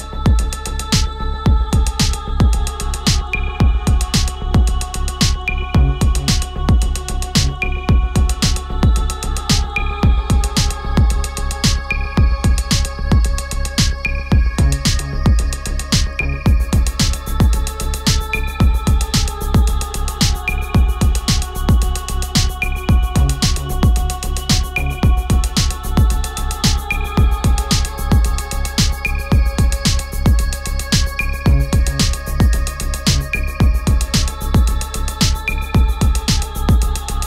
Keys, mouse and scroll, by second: 1.8 click, 8.2 Delete, 9.3 click, 12.5 shift+s, 23.0-24.3 drag, 24.3 Delete, 26.2 click, 28.9 shift+s, 32.0 click.